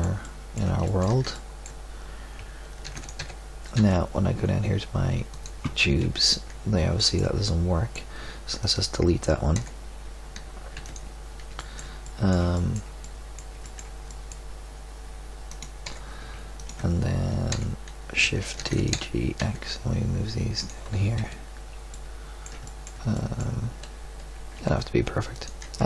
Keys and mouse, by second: 2.8 shift+d, 3.2 g, 6.0 KP_Decimal, 9.6 l, 10.7 x, 15.4 right click, 15.8 l, 17.4 l, 18.5 shift+d, 18.8 g, 21.1 KP_Decimal, 24.3 g.